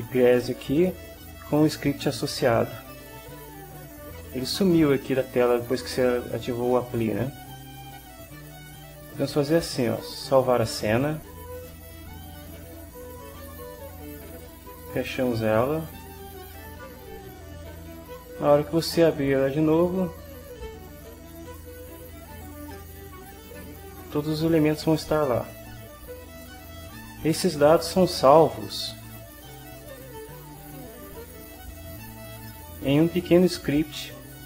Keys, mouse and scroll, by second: 10.0 click, 11.7 click, 11.8-13.1 middle drag, 13.1 click, 14.9 click, 16.5 click, 17.7 click, 20.9 click, 22.7-26.8 middle drag.